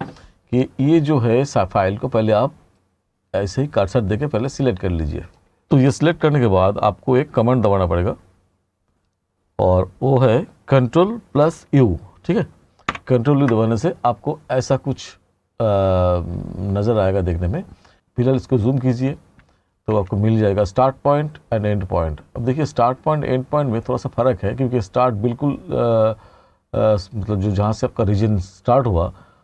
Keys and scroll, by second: 18.3 t.